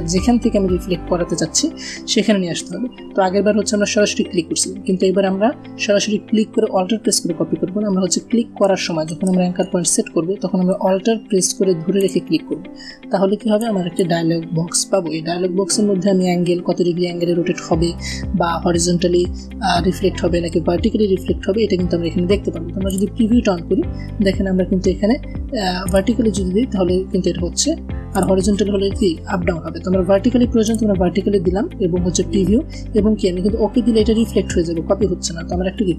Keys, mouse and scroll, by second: 10.6 alt+Num_Lock, 11.9-14.1 alt+drag, 22.6 click, 25.7 click, 28.0 click, 30.5 click.